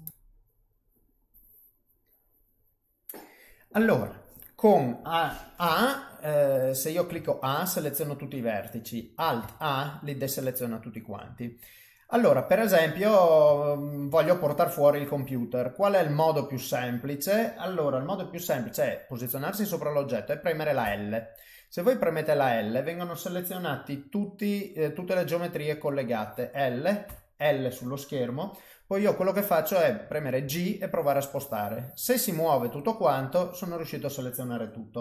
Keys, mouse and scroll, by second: 6.6 click, 7.1 a, 9.4 alt+a, 10.0 middle click, 11.6 middle click, 13.0 middle click, 13.5 ctrl+middle click, 14.2 shift+middle click, 15.4 middle click, 20.8 l, 27.1 l, 30.4 g.